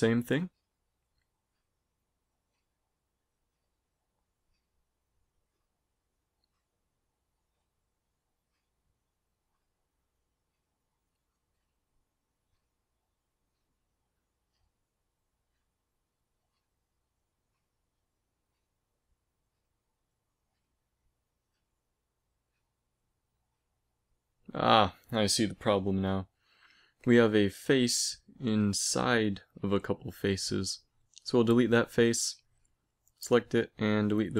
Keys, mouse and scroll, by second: 0.2 middle click, 4.5 middle click, 5.4-6.9 right drag, 6.0 x, 7.4-9.3 right drag, 8.0 x, 9.4 middle click, 15.7 middle click, 15.9 middle click, 16.0 click, 17.8 a, 18.7 right click, 19.3 right click, 20.7 g, 23.4 z, 24.0 g, 24.9 middle click, 26.9-30.2 right drag, 30.2 x, 33.1 ctrl+z, 33.4 x.